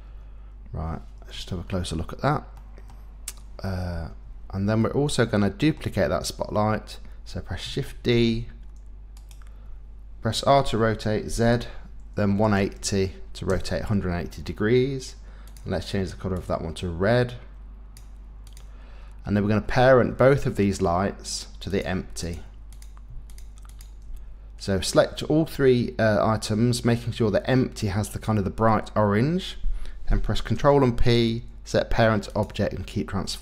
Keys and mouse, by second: 1.3 KP_Decimal, 2.6 middle click, 4.8 middle click, 8.1 shift+d, 9.1 click, 10.5 r, 11.3 z, 12.3 KP_1, 12.5 KP_8, 12.6 KP_0, 13.5 KP_Enter, 15.5 click, 18.4 click, 21.7 click, 22.2 click, 22.7 click, 23.3 shift+click, 23.7 shift+click, 30.5 ctrl+p.